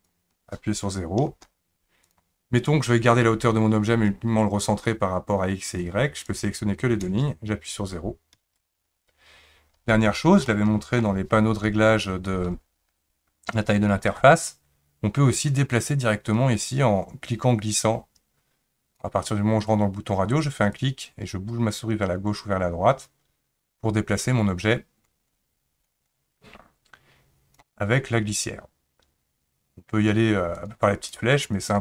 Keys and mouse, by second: 5.8-8.4 drag, 10.5 shift+middle click, 15.3-19.0 drag, 20.8-27.7 drag, 30.6 click, 31.0 click, 31.2 click, 31.4 click, 31.6 click.